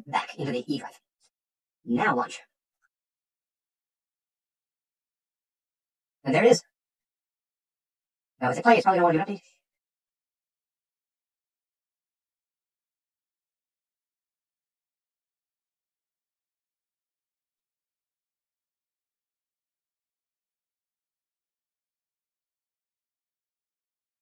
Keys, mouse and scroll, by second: 2.0 click, 6.3 click, 8.0 click.